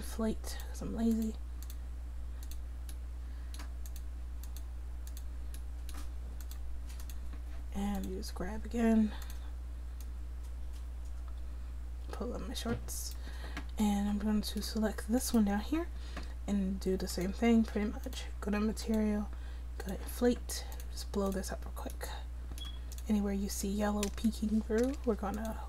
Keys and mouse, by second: 3.2 middle click, 3.4 middle click, 5.7 middle click, 15.2-16.3 drag, 24.8-25.6 drag.